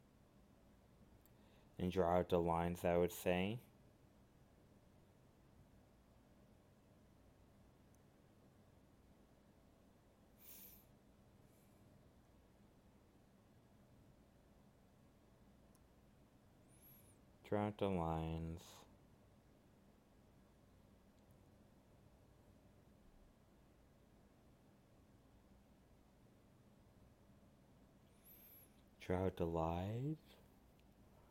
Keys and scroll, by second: 1.5 alt+space, 3.1 alt+space, 6.4 alt+space, 9.4 alt+space, 16.0 alt+space, 24.4 alt+space, 27.0 alt+space.